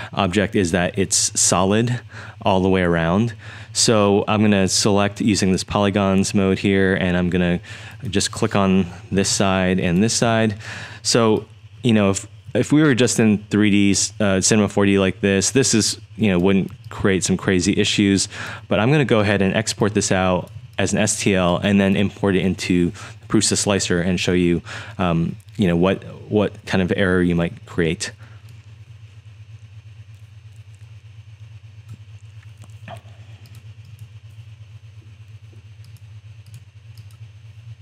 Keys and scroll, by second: 9.2 BackSpace, 11.3-13.2 typing, 16.7 3, 17.2 3, 17.3 3, 18.5-18.9 typing, 20.2-22.3 typing.